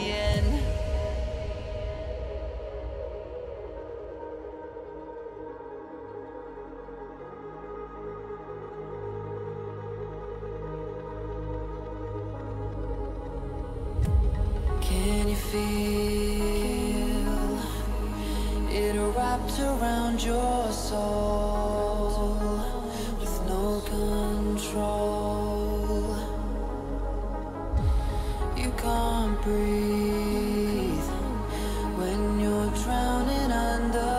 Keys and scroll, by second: 2.1 h, 4.9 j, 20.7 h, 29.1 j, 30.6 g, 31.2 h.